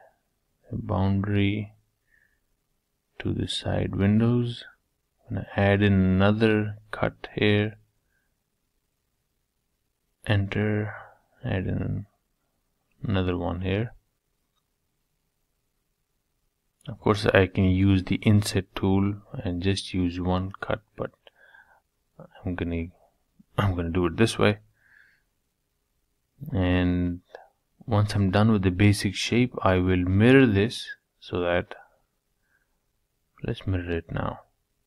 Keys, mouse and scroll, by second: 2.2-3.2 middle drag, 3.2 k, 10.3 k, 18.1 middle click, 18.8-20.7 scroll down 1, 20.7 scroll down 1, 21.5-23.4 shift+middle drag, 23.5-25.5 middle drag, 27.6 Tab, 27.9-29.6 middle drag, 29.6 Tab, 30.1-31.2 middle drag, 31.2 ctrl+r, 33.0 middle click, 33.9 scroll down 1, 34.2-34.8 middle drag.